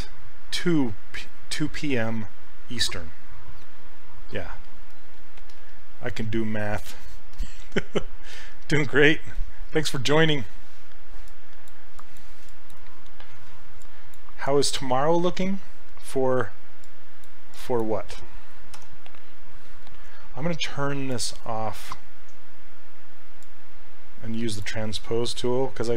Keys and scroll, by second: 18.8 e.